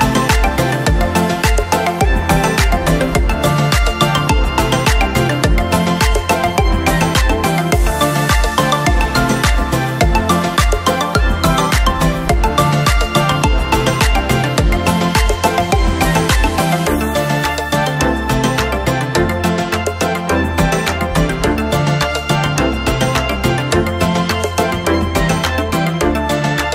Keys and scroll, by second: 6.2 ctrl+¡, 8.4 ctrl+j, 10.5 ctrl+£, 10.6 ctrl+™, 11.1 ctrl+ÿ, 12.2 ctrl+o, 13.4 ctrl+¡, 13.9 ctrl+œ, 15.6 ctrl+“, 18.3 ctrl+j, 19.0 ctrl+-.